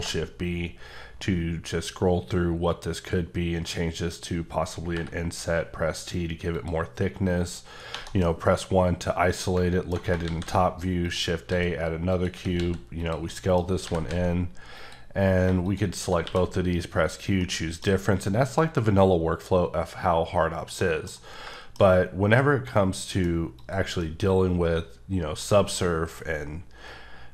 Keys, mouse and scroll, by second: 0.9-1.5 scroll down 1, 3.0 scroll down 3, 4.9 t, 6.5 click, 7.9 1, 8.2 middle click, 10.2 shift+a, 11.0 click, 11.5 s, 12.1 click, 12.6 x, 13.0 click, 13.3 middle click, 13.6 scroll down 3, 13.8 g, 14.1 z, 14.8 click, 15.1 scroll up 1, 15.6 click, 16.2 q, 16.9 click, 17.4 middle click, 20.8 middle click, 21.9 scroll up 1, 22.4 middle click, 23.5 click, 24.0 middle click.